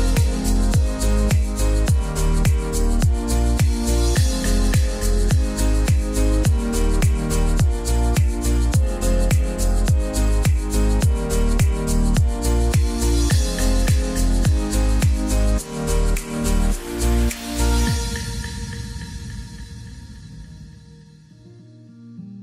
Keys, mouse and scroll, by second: 3.3-4.0 scroll down 1, 4.0-5.1 scroll up 1, 5.1-6.8 drag, 6.8-7.3 scroll down 1, 7.3-8.1 scroll up 1, 8.1 click, 9.9-10.3 scroll down 1, 11.1 scroll up 1, 11.5 scroll down 1, 12.1-12.5 scroll up 1, 15.0 click, 18.3 typing, 18.4-22.4 drag.